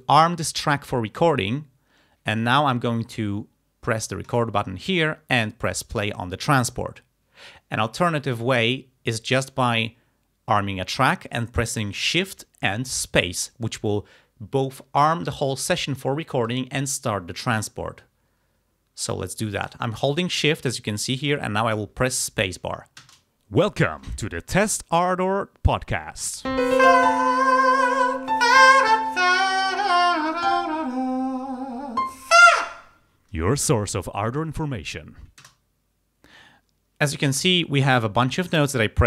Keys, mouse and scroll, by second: 4.3 click, 9.5 click, 23.1 shift+space, 35.5 space.